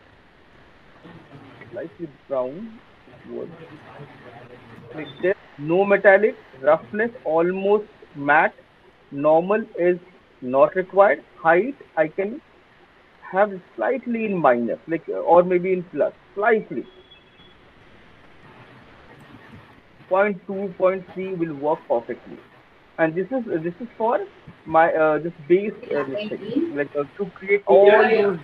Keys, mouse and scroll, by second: 0.3 click, 1.4 click, 3.7 click, 4.7 click, 7.7 click, 8.0-8.5 scroll, 9.1-10.5 scroll, 10.8 click, 11.7 scroll, 12.2-12.6 scroll, 20.2 click, 23.0 alt+middle click, 23.6 alt+click, 23.9 alt+middle click, 24.5 alt+click, 24.9 alt+middle click, 26.2 alt+middle click, 26.8 alt+middle click.